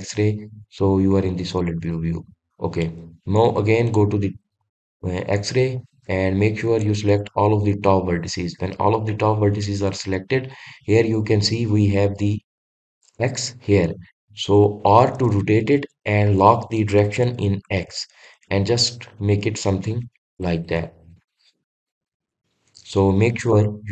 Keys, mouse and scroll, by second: 3.9-5.9 drag, 7.3-12.7 middle drag, 20.7 click, 21.2-23.9 middle drag.